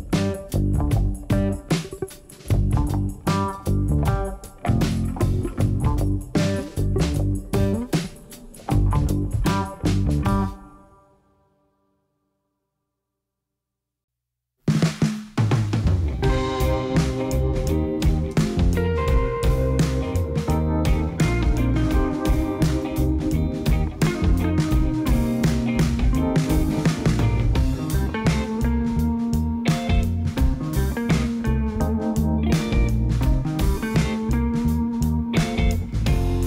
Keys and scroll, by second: 1.0 ctrl+z, 6.9 alt+d, 7.3 x, 16.2 Tab, 17.2 alt+a, 18.1 3, 24.3 Tab, 24.6 alt+a, 33.9 Tab, 34.8 2, 35.7 3.